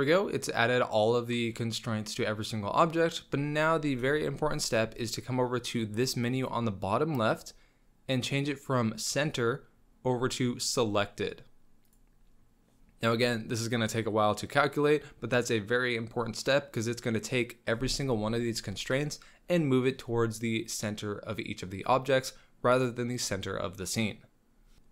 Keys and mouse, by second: 0.3-0.8 drag, 0.8-3.2 middle drag, 4.4-4.9 shift+middle drag, 6.4-6.8 right drag, 7.3 click, 10.0-24.7 drag.